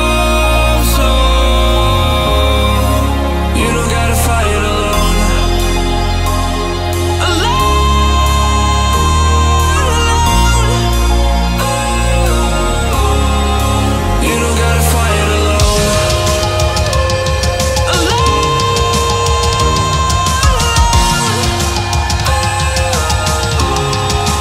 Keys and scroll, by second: 14.9 alt+a.